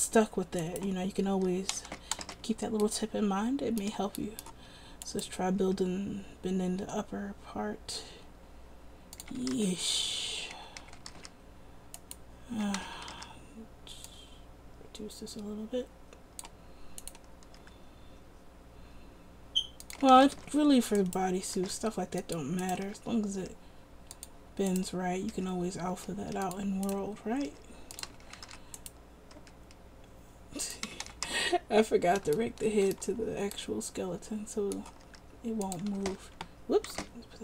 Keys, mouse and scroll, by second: 1.8 a, 2.0 a, 2.4 alt+r, 5.8 r, 9.4 a, 9.7 alt+r, 10.7 a, 10.9 a, 11.3 alt+r, 12.7 a, 12.9 a, 13.3 alt+r, 17.7 r, 20.2 a, 20.3 a, 20.5 alt+r, 21.7 r, 23.0 r, 25.5 r, 27.6 r, 28.3 a, 28.4 a, 28.6 alt+r, 29.5 r, 31.0 a, 31.2 a, 31.4 alt+r, 35.2 r, 36.1 ctrl+a, 37.2 ctrl+z.